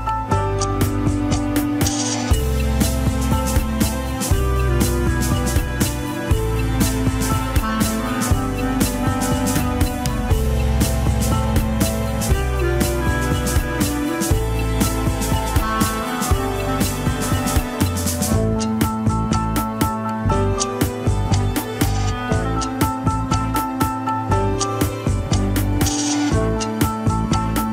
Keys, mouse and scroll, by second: 0.1 shift+middle drag, 1.7 click, 2.1 alt+z, 2.6 g, 4.5 click, 5.1 g, 6.9 click, 7.3 g, 8.2 click, 8.7 g, 9.9 scroll down 4, 10.0-12.0 middle drag, 12.6 scroll up 5, 13.2 click, 13.7 g, 15.5-16.9 middle drag, 16.9-17.4 scroll down 3, 17.0 KP_1, 17.9 ctrl+s, 20.7 alt+r, 20.9 alt+g, 21.2-21.7 shift+middle drag, 21.7-22.5 scroll down 11, 22.5-24.5 shift+middle drag, 24.5 scroll up 3, 25.1-25.4 drag, 25.8 r, 26.5-27.7 middle drag.